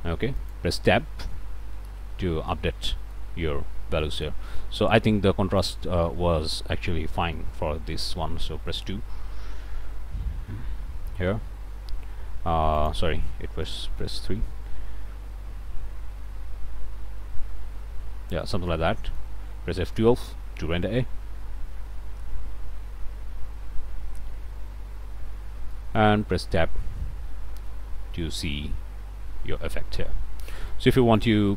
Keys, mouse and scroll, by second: 0.3 click, 1.0 Tab, 1.8 Tab, 2.5 middle click, 3.3 scroll down 1, 3.8 middle click, 5.6 click, 7.1 2, 7.3 Return, 12.8 click, 13.7 KP_3, 14.0 KP_Enter, 18.7 click, 19.9 F12, 25.7 click, 26.4 Tab, 27.7 click.